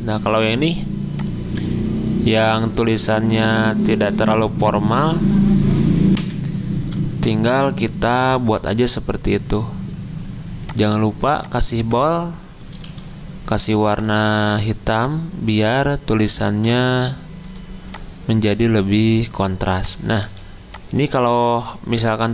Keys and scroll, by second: 6.1 F10, 6.2 F10, 7.2 ctrl+shift+], 12.8 d, 20.2 a.